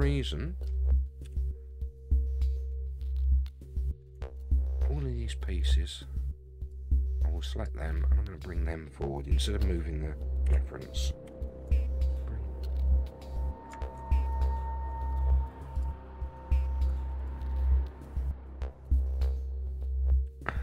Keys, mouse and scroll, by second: 1.2 KP_3, 2.2-2.6 scroll up 2, 3.4 scroll up 2, 4.1 Tab, 4.7-5.3 scroll down 1, 5.3-5.9 scroll down 1, 6.7-7.6 drag, 8.1-8.5 scroll up 2, 10.4 g, 14.3 ctrl+z, 15.7 click, 16.2-16.6 middle drag, 17.2 shift+click, 18.0 shift+click, 19.0 shift+click, 20.2 KP_3.